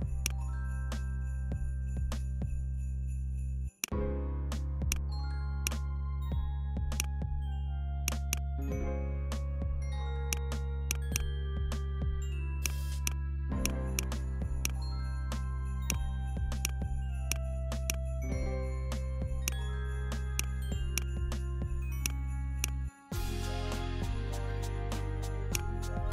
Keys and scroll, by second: 8.6 Down, 17.4 BackSpace, 17.9 BackSpace, 19.8 BackSpace, 21.1 BackSpace, 22.1 BackSpace, 22.6 BackSpace.